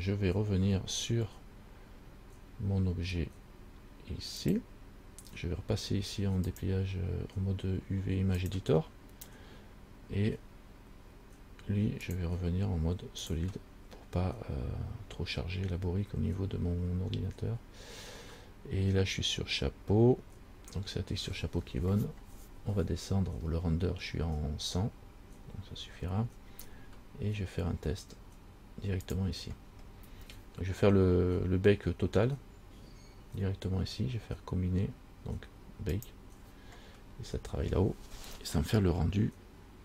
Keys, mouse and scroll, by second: 4.6 click, 6.6 click, 12.2 click, 13.4 click, 22.6-23.4 scroll down 1, 23.4-25.5 scroll down 3, 25.5-26.9 scroll down 4, 29.2 click, 29.9-32.4 scroll down 9, 36.1 click.